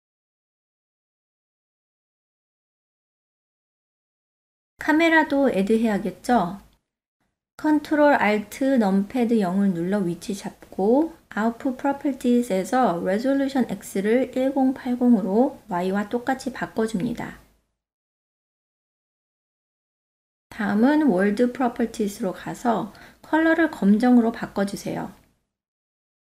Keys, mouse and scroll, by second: 0.4 Tab, 1.3-1.9 ctrl+middle drag, 2.5 middle click, 5.0 shift+a, 10.5 ctrl+alt+KP_0, 12.0 click, 13.3-14.9 drag, 16.7 F6, 17.1-17.8 ctrl+middle drag, 17.9 shift+middle click, 18.3 middle click, 19.4 click, 20.0 click, 21.7 click, 24.5 click, 25.2 drag.